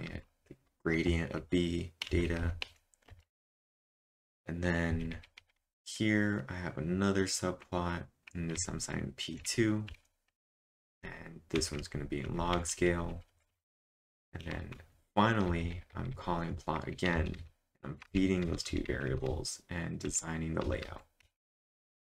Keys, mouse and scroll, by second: 2.1-3.0 typing, 4.9-5.6 typing, 7.4 typing, 8.6-14.5 typing, 16.1-22.0 typing, 21.7-22.0 drag.